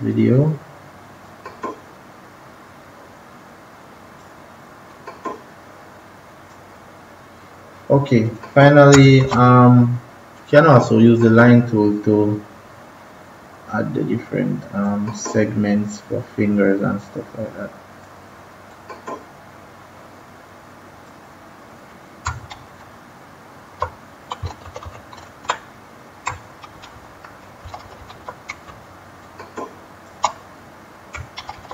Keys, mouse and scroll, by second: 1.2-8.8 drag, 9.1 ctrl+-, 10.3 click, 14.8-22.2 drag, 22.4 typing, 24.6 ctrl+z, 24.8 ctrl+z, 26.7 ctrl+-, 26.8 ctrl+-, 27.6-29.3 typing, 27.7 ctrl+=, 29.1 click, 31.3-31.7 typing.